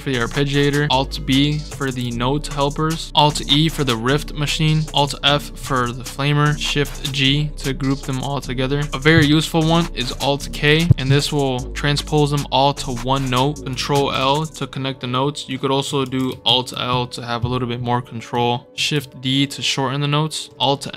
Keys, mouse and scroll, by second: 1.8 alt+b, 5.9 scroll down 2, 6.8 shift+g, 7.5-8.9 drag, 10.5 alt+k, 12.7 scroll up 2, 13.9 ctrl+l, 16.0 ctrl+z, 16.4 alt+l, 18.0 scroll up 2, 18.3 click, 18.4 scroll down 2, 18.8 shift+d.